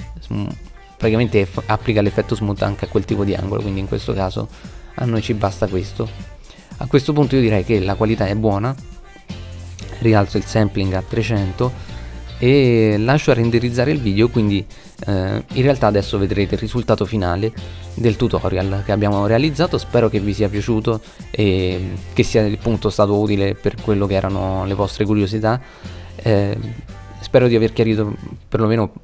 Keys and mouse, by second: 5.3-6.9 middle drag, 8.5 middle click, 9.8 KP_0.